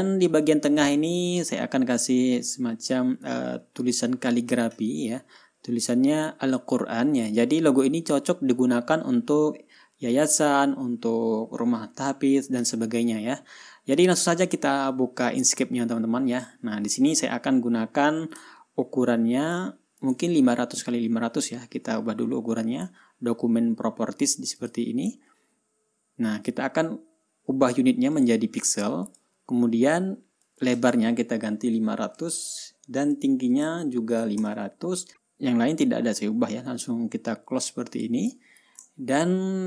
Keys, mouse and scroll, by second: 2.0 scroll up 2, 3.0 scroll down 2, 3.5 scroll up 2, 8.2-8.6 scroll down 2, 9.7 scroll up 2, 14.2 scroll down 2, 14.8 scroll up 2, 17.6-17.9 scroll down 2, 17.9 scroll up 2, 18.4 scroll down 2, 18.9 ctrl+scroll up 2, 19.3 ctrl+scroll down 2, 20.4 click, 25.0 click, 28.6 click, 29.5 click, 30.9 click, 32.2 5, 32.5 0, 33.6 click, 34.5 KP_5, 34.8 KP_0, 38.3 click, 39.4 ctrl+scroll down 2.